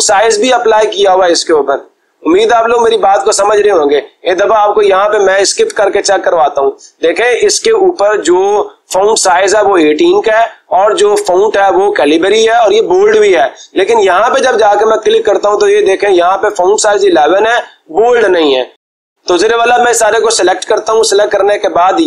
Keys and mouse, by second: 4.1 click, 5.6 Escape, 7.5-8.6 drag, 14.6-15.7 drag, 21.1-22.0 drag.